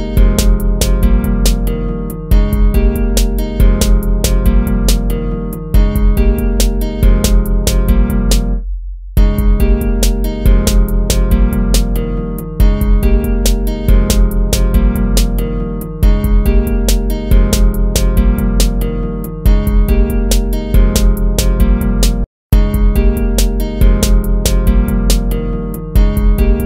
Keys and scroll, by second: 0.3 ctrl+-, 0.4 ctrl++, 1.0 ctrl+-, 1.2 ctrl+-.